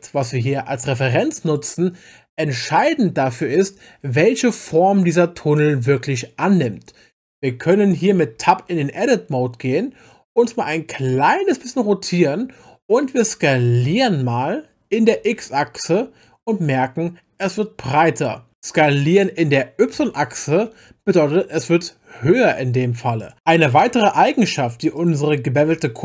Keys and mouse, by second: 1.4 click, 8.4 Tab, 10.4-12.4 middle drag, 13.9 s, 15.1 x, 19.9 s, 20.5 y, 23.2 click, 23.9 Tab, 25.0 click.